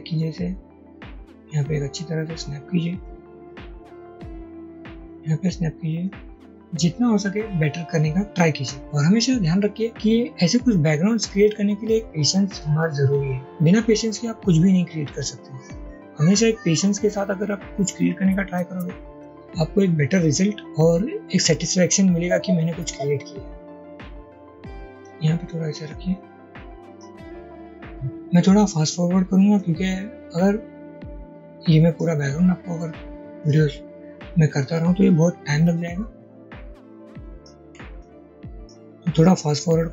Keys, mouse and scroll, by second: 4.4-5.5 drag, 6.1 click, 7.3-8.6 drag, 9.7-12.5 drag, 13.9 shift+click, 14.1 shift+double click, 14.3 alt+click, 23.8 ctrl+z, 26.6 a, 37.7 a.